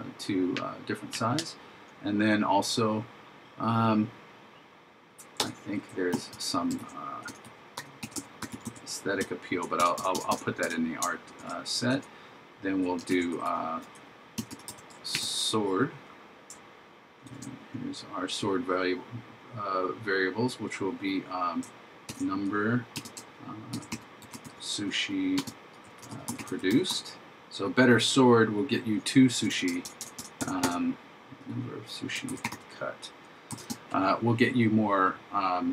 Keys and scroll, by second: 6.9 shift+a, 11.4 shift+0, 13.1 shift+s, 17.3 shift+9, 22.1 shift+3, 23.8 shift+s, 32.3 shift+c.